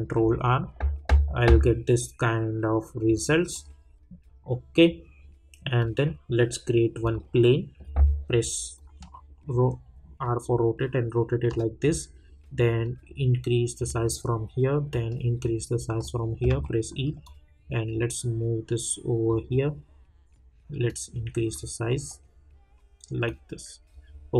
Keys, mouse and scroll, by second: 3.5 click, 5.8-12.8 drag, 12.8-16.5 drag, 16.5 e, 17.2-21.9 drag, 21.9 middle click, 23.2 click.